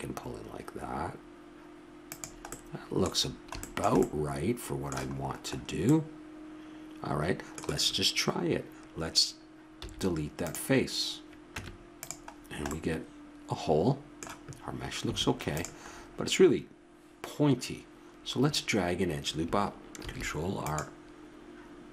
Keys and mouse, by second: 2.5-3.6 drag, 3.6 middle click, 3.9-5.5 drag, 5.5-7.6 middle drag, 9.8 x, 11.6 Tab, 12.3 middle click, 15.0 Tab, 20.0 ctrl+r.